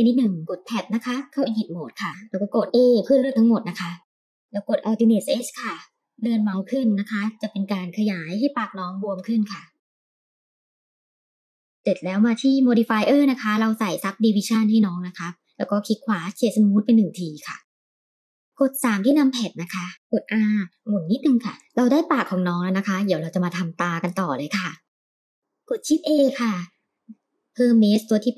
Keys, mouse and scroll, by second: 0.5 Tab, 2.8 a, 5.8 alt+s, 11.8 Tab, 12.4-13.9 drag, 15.0-16.6 drag, 15.0 right click, 16.6-18.1 middle drag, 18.6 KP_3, 19.2-19.6 scroll up 2, 19.8 shift+middle drag, 20.0 r, 21.5 Tab, 25.3 shift+a.